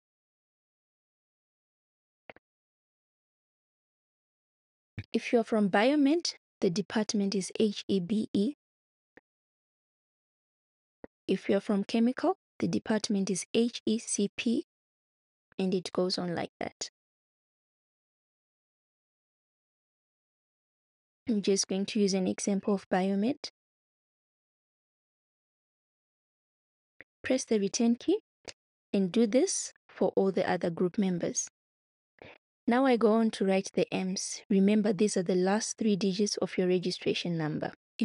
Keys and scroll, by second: 24.6-26.6 typing, 27.3 Return.